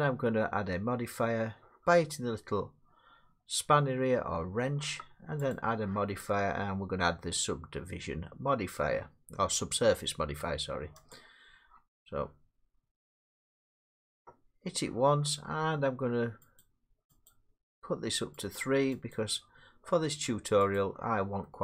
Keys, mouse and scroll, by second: 1.8-2.7 middle drag, 5.5-10.6 drag, 11.1 click, 13.5 middle click, 16.6 click, 17.3 click, 18.6 click, 19.1 click, 20.8 click.